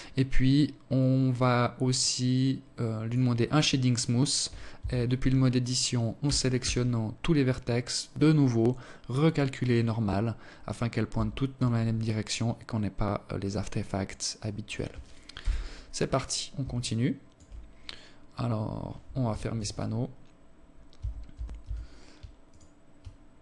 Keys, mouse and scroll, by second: 1.8 click, 3.6 Tab, 5.0 a, 5.4 a, 7.4-8.4 scroll down 4, 8.4 click, 9.9 Tab, 11.0 alt+click, 13.2 alt+click, 14.2 KP_7, 15.6 alt+shift+click, 16.5-17.2 scroll up 3, 18.4 t, 19.8 Tab, 20.2 Tab, 20.4 Tab, 21.3 alt+right click, 23.0 alt+click.